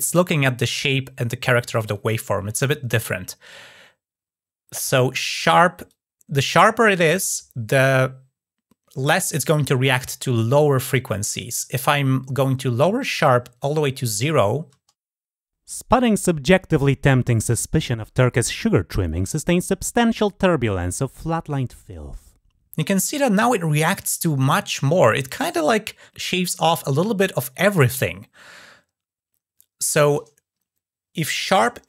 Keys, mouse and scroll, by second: 5.7-7.0 drag, 11.7-13.4 drag.